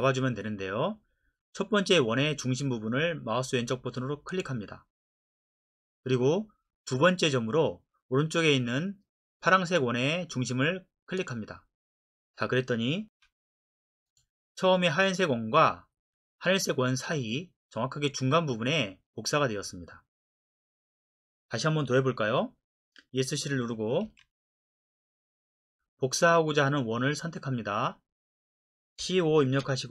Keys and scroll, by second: 13.1 Escape, 24.0 Escape, 29.0-29.6 typing.